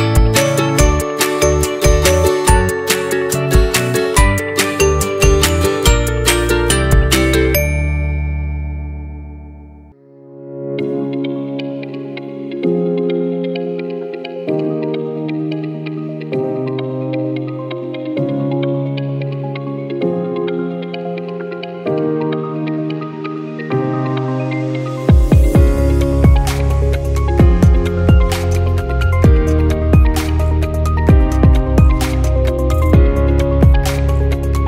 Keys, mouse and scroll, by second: 1.0-1.5 scroll down 5, 1.5-2.9 right drag, 2.9-4.9 drag, 5.0-6.2 middle drag, 6.2 s, 8.0-9.4 scroll up 5, 9.4 s, 11.3 scroll down 1, 11.5-13.2 middle drag, 13.2 s, 14.7-15.0 scroll up 1, 15.0-17.1 shift+middle drag, 20.4-21.6 middle drag, 24.6-25.8 middle drag, 25.8-26.5 scroll down 1, 26.5 click, 26.9-28.0 scroll down 4, 28.0 g, 30.9 click, 31.8-32.9 scroll up 8, 32.2 middle drag, 32.9-34.6 middle drag.